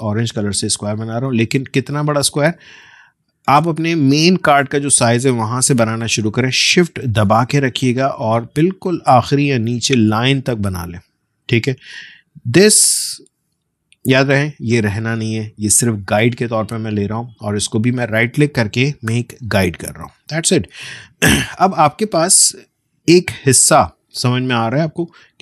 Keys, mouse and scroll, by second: 2.6-12.6 drag, 12.7 click, 17.4 right click, 19.4 click, 23.4-24.2 alt+scroll up 1.